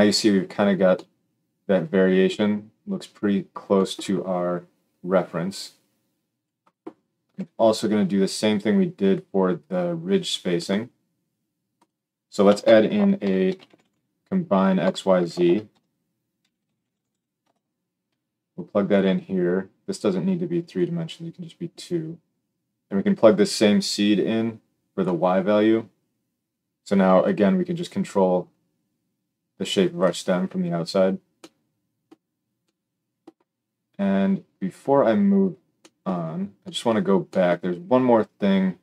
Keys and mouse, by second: 7.3 g, 9.6-11.7 middle drag, 11.7 click, 12.3-19.8 shift+middle drag, 12.4 shift+a, 15.4 shift+a, 19.8-38.8 drag.